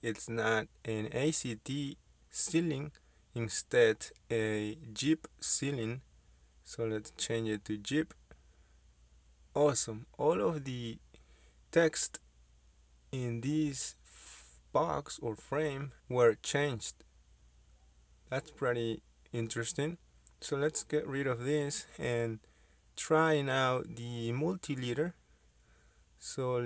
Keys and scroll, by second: 5.1-9.6 typing, 8.4 Caps_Lock, 19.6 Escape, 24.8 Delete.